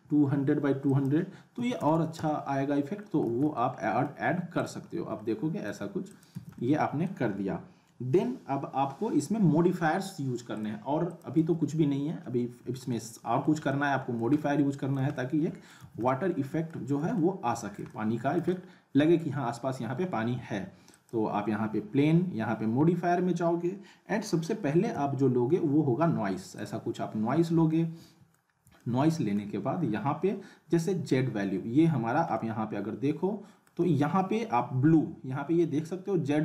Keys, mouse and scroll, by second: 0.9 click, 3.2 z, 3.5-4.2 alt+middle click, 4.6 click, 4.8 scroll up 1, 5.2-5.8 alt+middle click, 6.1 click, 6.3 z, 6.6-7.1 alt+middle click, 7.3-7.7 scroll up 1, 9.6 z, 10.5 click, 11.4 z, 11.7-12.3 alt+middle click, 12.2-12.6 scroll up 1, 12.9-13.5 alt+middle drag, 15.8 z, 16.0-16.7 alt+middle click, 16.9 scroll up 1, 17.1-17.8 middle click, 17.9-19.4 alt+middle drag, 20.9 click, 24.9 n, 26.6 click, 28.6 scroll up 1, 28.8-29.4 alt+middle drag, 32.0 scroll up 1, 32.4-33.9 alt+middle drag.